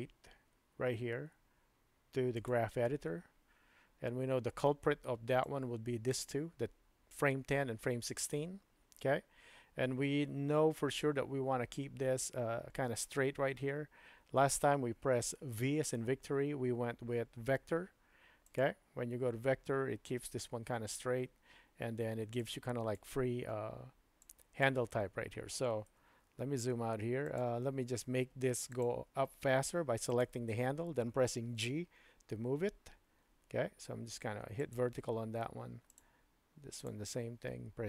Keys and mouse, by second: 5.4 click, 15.8 v, 22.4-23.1 drag, 24.2-24.8 drag, 25.9 KP_Decimal, 27.2 click, 28.7 click, 30.1 click, 31.6 g, 35.9 click, 36.8 click, 37.3 g.